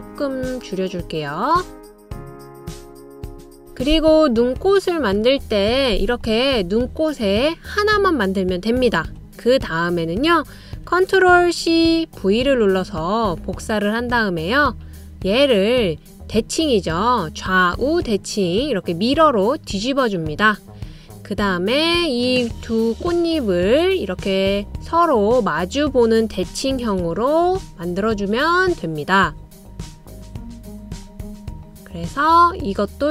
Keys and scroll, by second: 12.2 super+c, 12.8 super+v, 27.5 Left, 27.7 Left.